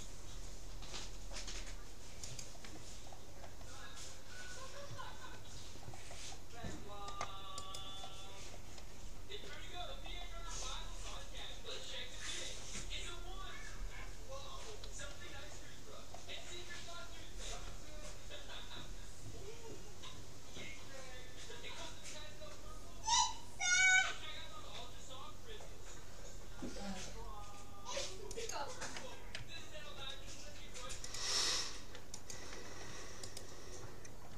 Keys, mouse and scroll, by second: 0.0-1.6 drag, 3.1-4.2 middle drag, 4.2-5.1 scroll down 1, 5.1 middle click, 5.8-7.2 middle drag, 7.2-7.6 scroll up 1, 7.6-9.4 right drag, 9.0-12.4 middle drag, 15.6-17.8 middle drag, 17.6 g, 29.4 a, 31.0-32.8 drag, 33.4-34.3 right drag.